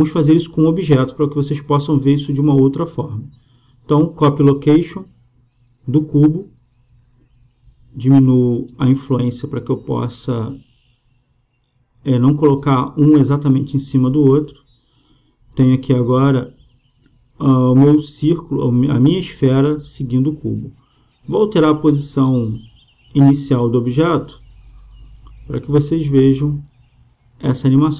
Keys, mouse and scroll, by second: 0.8-2.5 right drag, 4.1-5.9 drag, 6.5-8.3 drag, 9.5-11.3 drag, 11.7-13.4 drag, 14.2-17.7 drag, 22.4-24.0 right drag, 24.0 g, 26.9-27.9 drag.